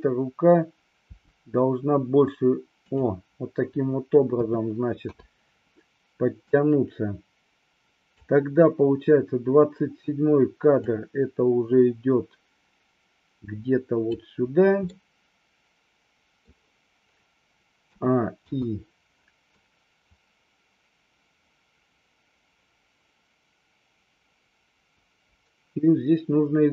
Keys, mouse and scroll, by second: 1.2 g, 3.0 click, 4.4 a, 5.2 i, 6.7-8.3 drag, 10.9-14.2 drag, 15.0-16.5 middle drag, 17.9 a, 18.5 i, 19.7-26.7 drag.